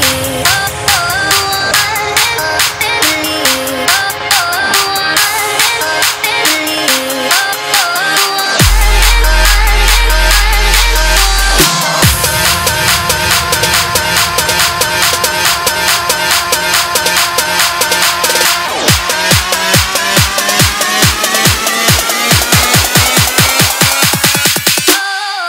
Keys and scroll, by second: 11.8 ctrl+s, 12.6 ctrl+d, 16.3 ctrl+d, 20.4 ctrl+d.